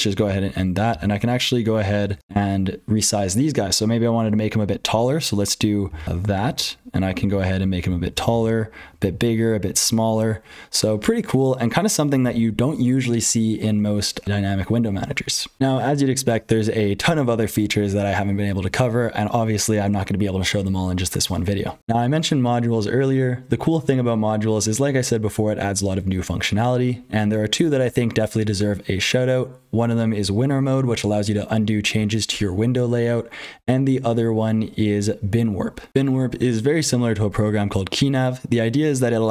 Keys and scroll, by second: 0.0-39.3 typing, 0.1 ctrl+g, 0.9 ctrl+x, 1.9 ctrl+z, 5.8 ctrl+z, 12.2 ctrl+g, 21.8 alt+x, 21.8 Return, 21.8 super+h, 21.8 F12, 35.9 F12.